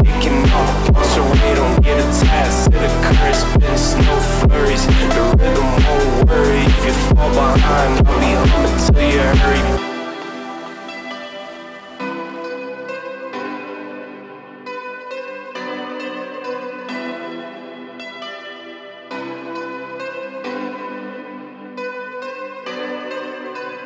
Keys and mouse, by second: 2.2 click, 2.5 shift+click, 3.5 m, 5.0 click, 5.2 x, 7.3 click, 8.4 click, 8.7 shift+click, 9.6 m, 11.0 click, 12.8 2, 13.0 click, 13.5 g, 16.4 click, 17.0 click, 17.7 shift+middle click, 18.4 shift+middle click, 18.8 shift+middle click, 19.2 g, 21.1 click, 22.3 click.